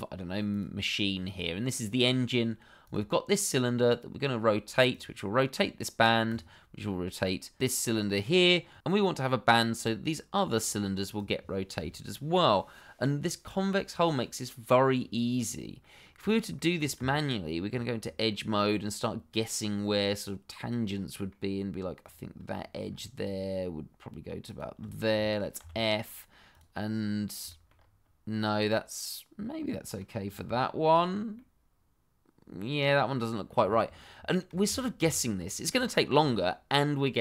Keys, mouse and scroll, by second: 0.5 click, 2.8 click, 8.8 ctrl+z, 11.1 click, 15.8 middle click, 16.3 click, 16.6 middle click, 16.6 shift+middle click, 16.9 Tab, 17.9-18.2 scroll up 1, 18.2 middle click, 19.0-19.3 scroll down 1, 19.3 middle click, 22.0 click, 22.5 shift+middle click, 22.7 shift+middle click, 22.8-23.6 shift+scroll up 1, 24.4 shift+click, 24.9 scroll down 1, 25.2 shift+middle click, 25.6 f, 26.0 middle click, 26.5 click, 27.0-27.4 scroll up 1, 27.4 shift+middle click, 27.6 middle click, 27.7 scroll up 1, 28.6 middle click, 30.2-30.5 scroll down 1, 30.5 shift+middle click, 30.9-31.3 scroll up 1, 31.3 middle click, 33.4-33.7 scroll down 1, 33.7 shift+middle click, 34.0 middle click, 34.6 ctrl+z, 36.4 middle click.